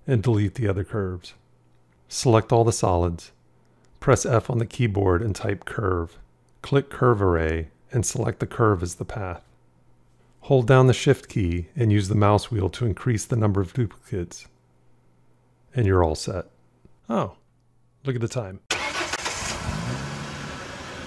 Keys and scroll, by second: 4.0 f, 9.2-10.2 shift+scroll.